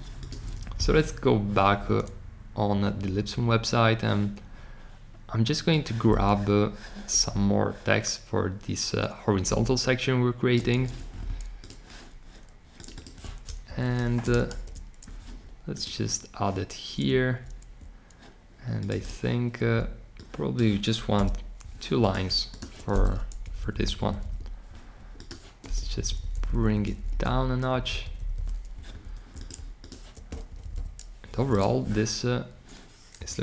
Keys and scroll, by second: 10.7 super+c, 14.1 space, 14.4 super+v.